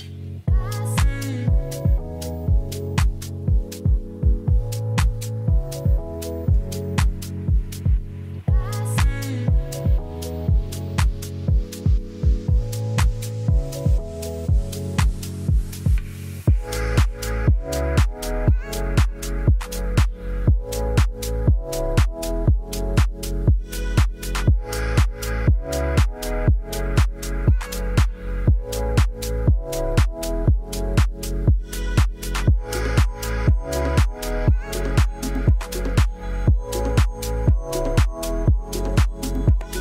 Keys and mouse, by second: 1.1 r, 3.0 4, 3.1 5, 4.3 Return, 6.3-6.6 middle drag, 6.9 middle drag, 7.2 ctrl+z, 8.3 shift+click, 9.3 middle click, 9.7 r, 10.0 z, 10.9 4, 10.9 5, 11.8 Return, 12.2 KP_0, 13.1 ctrl+s, 17.2 space, 22.4 space, 23.1 ctrl+s, 23.7-24.5 drag, 27.2 click, 27.8-28.4 drag, 29.1-29.6 drag, 31.7 drag, 36.2 middle drag, 36.9 shift+middle drag, 37.1 middle drag, 37.6 shift+a.